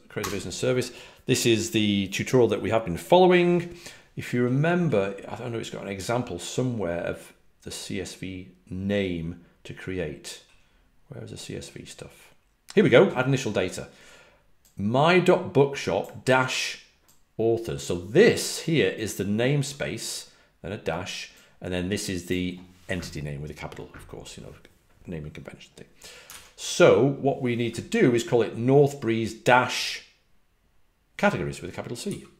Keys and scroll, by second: 0.0-1.1 typing.